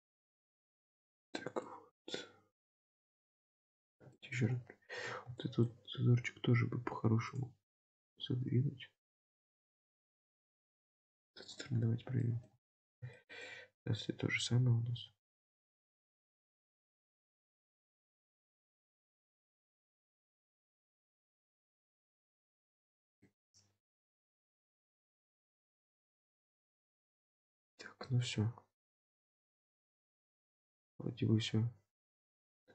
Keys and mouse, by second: 1.8 middle click, 2.9 Tab, 3.3 drag, 3.7-4.4 middle drag, 5.1 Tab, 5.5 shift+middle click, 6.9 ctrl+r, 10.6-11.6 middle drag, 12.3 shift+middle click, 13.2 shift+middle click, 20.2-21.4 middle drag, 20.8 Tab, 21.6-22.7 middle drag, 23.2-25.9 middle drag, 26.5-26.8 shift+middle drag, 27.3-30.1 middle drag, 30.6-32.7 middle drag.